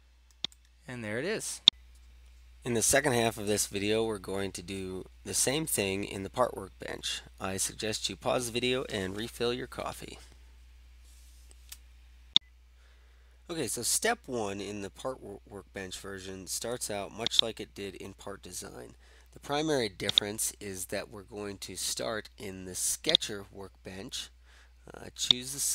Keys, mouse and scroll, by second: 17.3 click, 20.3-21.2 drag, 23.1-25.7 drag.